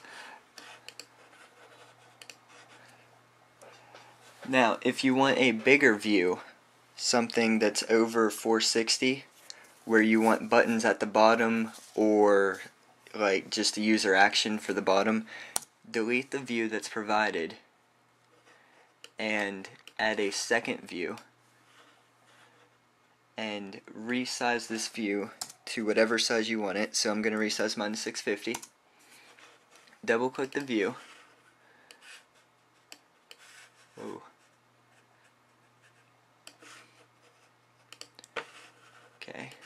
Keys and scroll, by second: 28.1-29.3 typing.